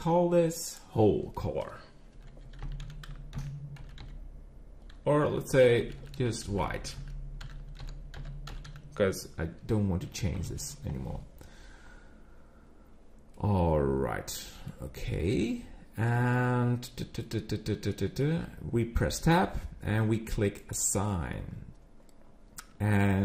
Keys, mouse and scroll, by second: 6.0 BackSpace, 6.3 BackSpace, 6.8 BackSpace, 6.9 BackSpace, 13.3 middle click, 16.6-17.2 scroll down 2, 17.2 middle click, 17.2 scroll down 1, 19.0 Tab, 20.6 click, 22.7 Tab.